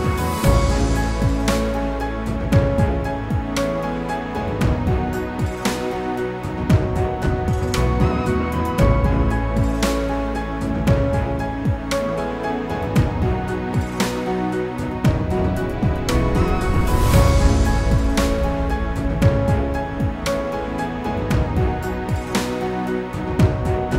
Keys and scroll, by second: 6.2 ctrl+g, 9.9 ctrl+g.